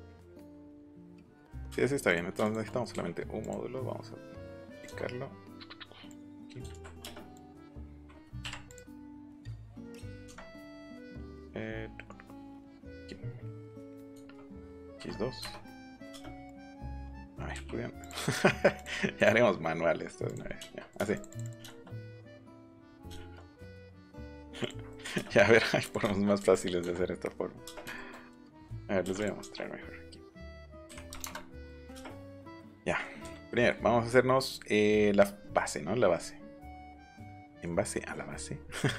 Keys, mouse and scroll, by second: 0.4 click, 1.1 click, 2.0 click, 2.4 shift+click, 3.4 click, 4.6 click, 6.0 click, 6.6 ctrl+z, 7.3 shift+click, 8.3 Up, 8.6 click, 10.0 click, 12.9 click, 14.1 x, 14.9 2, 15.4 Return, 16.0 space, 16.4 click, 16.6 click, 16.8 middle click, 18.0 click, 18.7 click, 19.1 click, 20.2 click, 20.4 middle click, 20.7 scroll up 2, 21.1 click, 21.6 scroll up 2, 23.6 click, 24.6 click, 25.8 click, 26.0 shift+middle click, 26.2 scroll down 1, 26.5 click, 27.7 scroll up 1, 27.9 shift+middle click, 28.3 ctrl+z, 29.0 m, 29.2-30.8 drag, 30.8 KP_5, 31.0 KP_0, 31.2 KP_Enter, 32.5 click, 32.8 middle click, 33.5 middle click, 34.4 middle click, 35.3 middle click, 35.8 middle click, 36.1 middle click, 36.7 middle click, 37.8 scroll up 2, 38.8 scroll down 2.